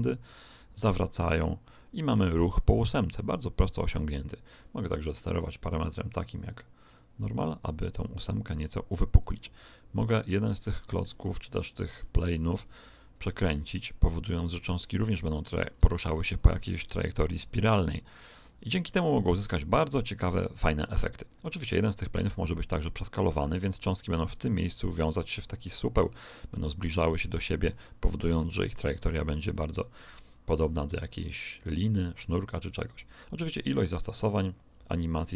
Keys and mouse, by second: 5.8 right click, 7.1 click, 10.0 right click, 10.4-12.8 drag, 12.8-13.8 middle drag, 12.8 r, 17.1 click, 22.1 s, 26.3-28.2 middle drag, 28.7 click.